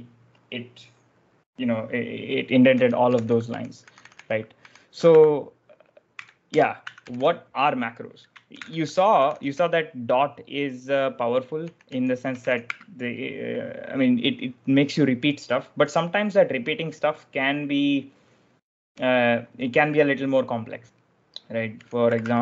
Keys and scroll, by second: 2.4-9.9 typing, 8.4 ctrl+j, 11.3-13.1 typing, 21.4-22.4 typing.